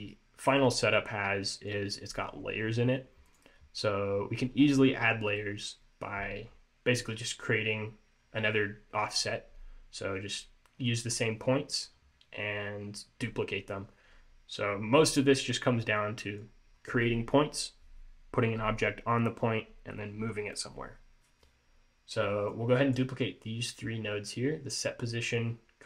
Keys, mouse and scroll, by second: 0.7 middle click, 3.4 click, 6.6-8.0 scroll up 2, 22.6 click, 25.5 scroll up 1.